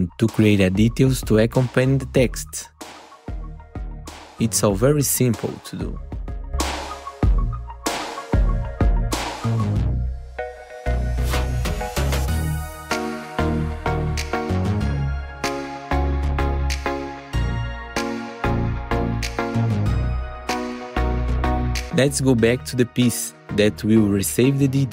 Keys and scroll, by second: 10.3 F4, 13.2 F4, 17.1 F4, 18.4 F4, 19.2 F4, 23.0 F4.